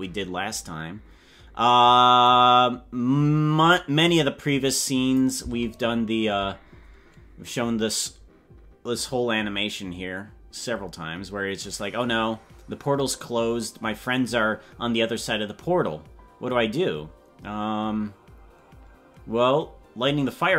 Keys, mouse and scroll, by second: 2.3 click, 5.4 space.